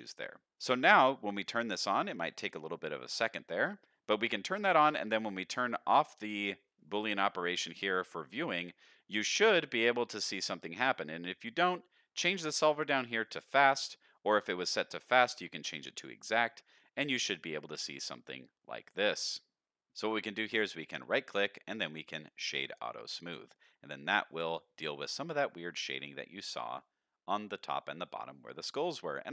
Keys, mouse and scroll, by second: 0.0 middle click, 0.5 alt+a, 0.5 click, 0.5 middle click, 1.9 click, 2.6 middle drag, 7.7 click, 8.3-8.7 middle drag, 8.9-9.4 middle drag, 9.7 scroll up 1, 9.9-10.7 middle drag, 13.3 click, 14.1 middle drag, 16.1 middle click, 16.8 scroll up 1, 17.1 middle click, 18.0 middle click, 18.8-19.9 middle drag, 19.9 click, 20.8-22.7 right drag, 23.2 middle click, 24.3 middle click, 25.0 shift+middle click, 25.4 middle click, 26.4-26.8 middle drag, 27.4-28.0 middle drag, 28.4-29.1 scroll down 2, 28.8-29.1 middle drag.